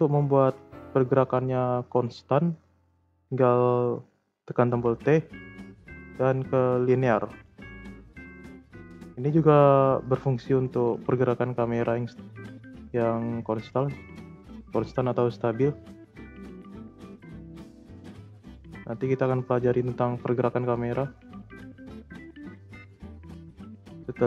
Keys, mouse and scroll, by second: 7.3 click, 8.2-11.2 drag.